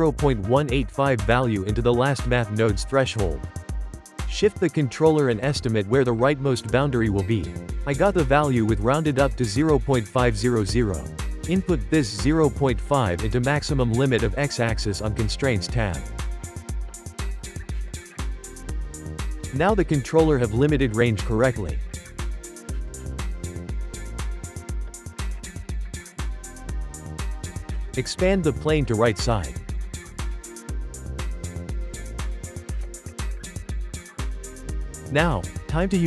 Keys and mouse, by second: 3.8-5.6 drag, 7.4 g, 10.1-12.0 drag, 13.2-16.0 drag, 16.1-16.5 ctrl+shift+middle drag, 16.5 g, 18.2 click, 18.6 g, 20.2 g, 24.7 click, 25.3 click, 25.7 Tab, 26.3 2, 26.5 click, 26.9 shift+click, 27.1 shift+click, 27.4 shift+click, 28.0 e, 28.8 click, 31.4 Tab, 31.9 click, 32.3 click, 33.7 click, 35.2 click.